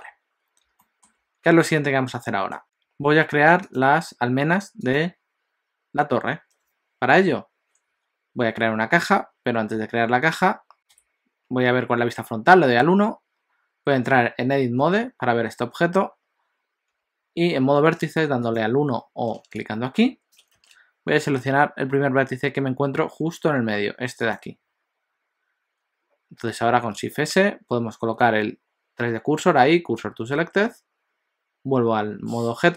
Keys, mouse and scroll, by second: 0.0 alt+a, 0.8 shift+middle click, 4.8 click, 9.1 KP_7, 10.7 middle click, 10.7 scroll up 2, 11.0 KP_1, 14.8 Tab, 17.0 1, 18.4 click, 24.3 click, 27.0 shift+s.